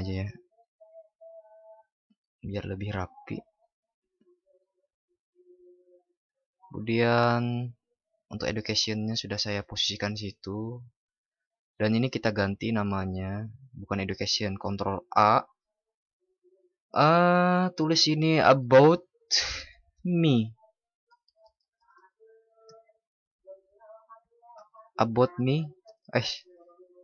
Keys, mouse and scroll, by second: 14.6 ctrl+shift+@.